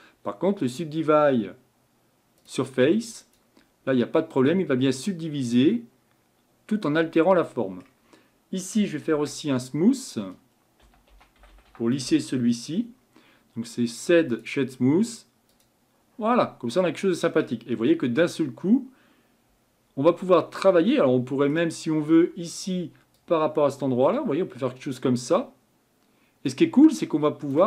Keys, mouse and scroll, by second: 5.6-14.4 drag, 14.4 o, 16.7-17.7 middle drag, 17.7-18.5 scroll down 4, 23.3-26.2 drag.